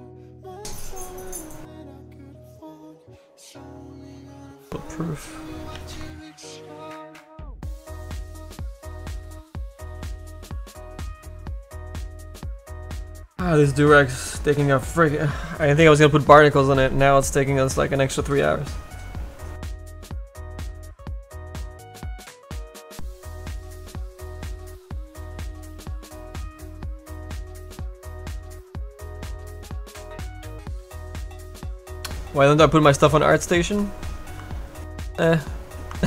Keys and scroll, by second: 3.0 s, 5.9 s.